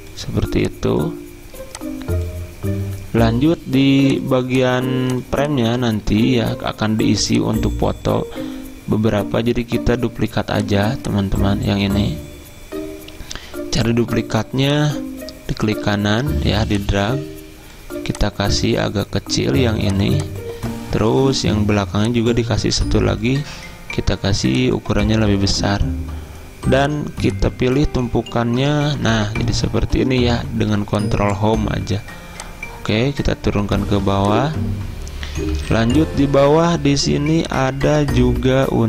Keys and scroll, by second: 6.1 ctrl+z, 28.7 ctrl+Home, 35.6 z.